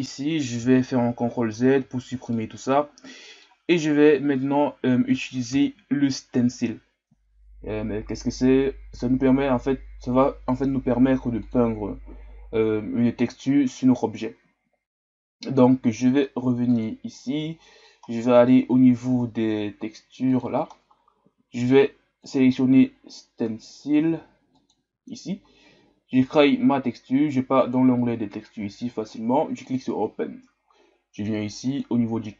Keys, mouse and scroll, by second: 0.0 click, 1.0 ctrl+z, 1.3 ctrl+z, 2.3-5.5 middle drag, 5.5 KP_1, 26.4-32.3 drag.